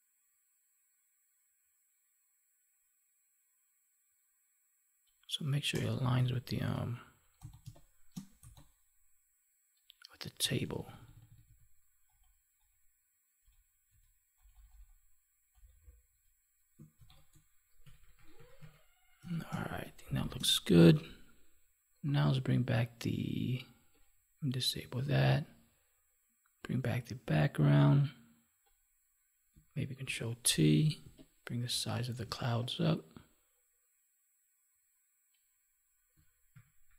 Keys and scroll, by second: 7.5 space, 16.9 ctrl+s, 19.4 space, 20.7 ctrl+s, 24.9 ctrl+s, 30.0 ctrl+t, 36.5 ctrl+-.